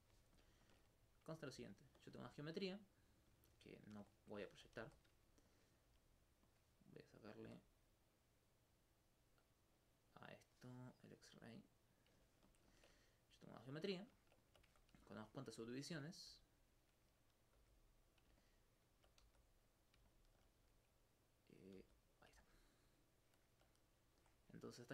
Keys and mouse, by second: 0.4 alt+click, 0.5 alt+click, 3.2 right click, 3.9 shift+Tab, 5.5 click, 5.9 click, 6.5 click, 7.0 right click, 11.8 click, 12.5 alt+click, 12.6 alt+c, 13.1 right click, 13.6 alt+click, 15.1 alt+click, 15.7 alt+click, 16.3 alt+s, 17.1 click, 17.6 click, 18.2 click, 19.7 click, 20.3 alt+click, 21.3 alt+click, 21.5 click, 21.8 click, 22.2 click, 22.4 alt+click, 23.3 alt+click, 24.3 alt+click.